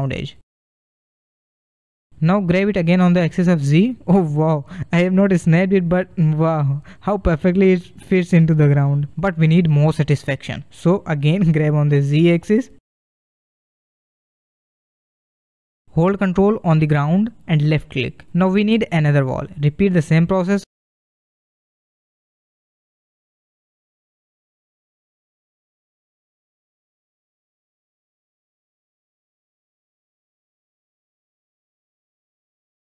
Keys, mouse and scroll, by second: 1.4 g, 4.8-5.4 scroll up 2, 5.4-6.8 shift+middle drag, 6.8-7.2 scroll up 3, 7.2-9.6 middle drag, 9.6 scroll down 2, 9.8-12.5 middle drag, 12.5 g, 17.9-18.5 scroll down 3, 18.5 middle click, 18.6 shift+d, 20.7 r, 25.7 g, 29.8 g, 32.7 scroll up 1.